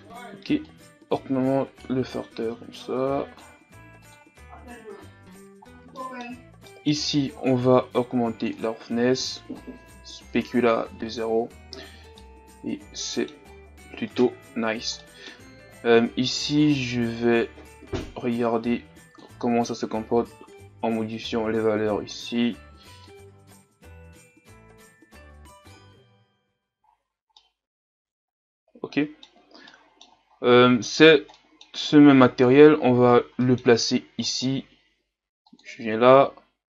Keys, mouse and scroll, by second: 0.7-5.2 drag, 7.8-11.3 drag, 11.3 a, 11.6-12.2 scroll down 6, 12.2-13.4 middle drag, 13.4-14.1 scroll up 5, 14.1 right click, 16.8-26.5 drag, 26.5 a, 26.8-27.3 scroll down 3, 27.3-30.3 middle drag, 30.3-31.0 scroll up 3, 31.0-31.4 scroll up 1, 31.4 middle click, 31.9-32.3 scroll down 2, 32.3-33.1 scroll up 3, 33.1 scroll down 1, 33.4 middle click, 34.3-36.2 right drag, 36.2-36.6 drag.